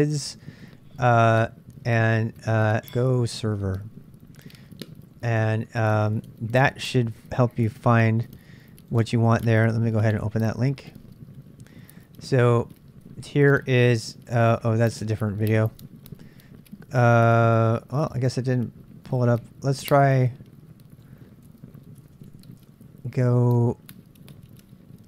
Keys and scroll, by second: 2.2-5.1 typing, 5.3 Return, 21.9 BackSpace, 22.1 BackSpace, 22.6 Return.